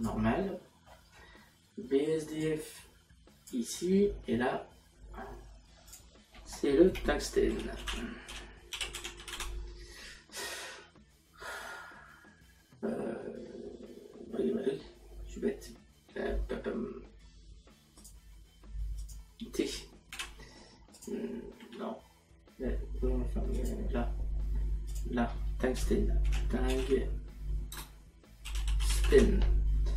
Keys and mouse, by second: 0.5 middle click, 2.5 click, 7.8 u, 9.3 t, 21.0 click, 21.6 t, 23.6 click, 24.9 click, 27.7 n.